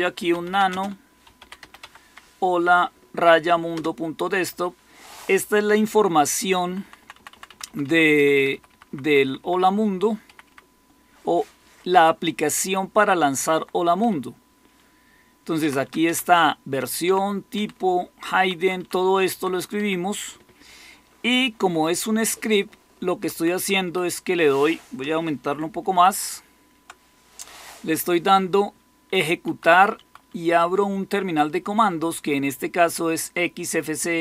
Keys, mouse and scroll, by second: 0.0-2.0 typing, 3.6 typing, 6.3 Down, 6.3 typing, 6.5 Down, 6.7 Down, 6.9 Down, 7.0 Down, 7.4 Down, 7.6 Down, 8.1 Up, 8.2 Up, 8.4 Up, 8.6 Up, 8.8 Up, 9.1 Up, 9.3 Up, 10.4 Up, 13.3 Down, 13.5 Down, 13.9 Up, 15.5 Down, 15.8 Down, 16.0 Up, 16.2 Up, 17.0 Down, 17.5 Down, 18.3 Down, 18.5 Down, 18.7 Down, 19.2 Down, 19.7 Up, 23.1 Right, 23.3 Right, 23.5 Right, 23.7 Right, 25.6 ctrl++, 26.1 ctrl++, 29.0 Left, 29.4 Right, 29.6 Right, 29.8 Right, 30.2-31.4 Right.